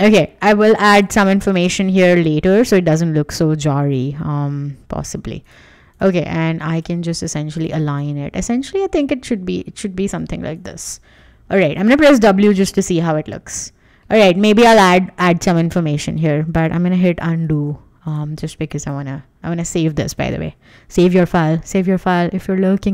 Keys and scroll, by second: 3.3 Escape, 12.7 w, 16.5 space, 17.5 super+z, 18.9 super+s.